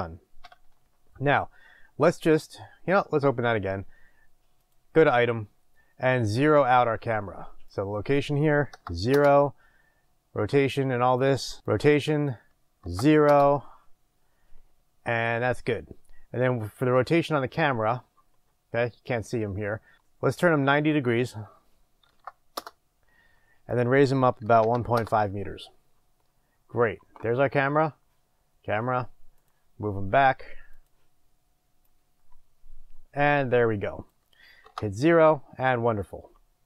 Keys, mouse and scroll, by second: 0.4 n, 3.0-6.7 drag, 9.1-11.6 drag, 9.2 Return, 11.6 KP_0, 13.3-20.9 drag, 13.4 Return, 17.4-18.2 scroll up 2, 22.7 Return, 22.7-29.5 drag, 25.0 Return, 25.9-28.7 scroll down 2, 31.9-36.6 drag, 34.7 KP_0.